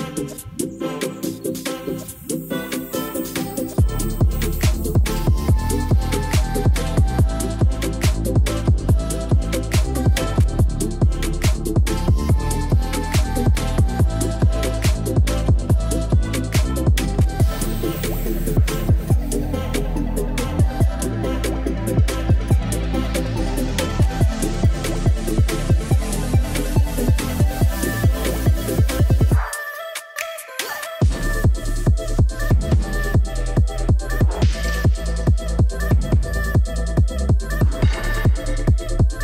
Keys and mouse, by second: 0.8-1.8 drag, 2.9 ctrl+s, 3.6 shift+middle click, 4.3 click, 6.6 click, 11.6 ctrl+s, 11.8 click, 12.4 shift+middle drag, 12.9 ctrl+s, 14.7 shift+middle click, 15.7 shift+middle click, 17.2 click, 17.8 shift+middle drag, 19.1 click, 24.4 click, 24.9 click, 25.2-27.1 drag, 26.7 l, 28.4 Tab, 29.6 KP_Divide, 30.3 middle click, 31.5 3, 33.1 shift+click, 33.9 shift+click, 34.2 shift+click, 34.4 shift+click, 35.0 shift+click, 35.2 shift+click, 35.8 shift+click, 36.9 shift+click, 37.4 shift+click, 37.7 shift+click, 38.2 shift+click, 38.5 shift+click.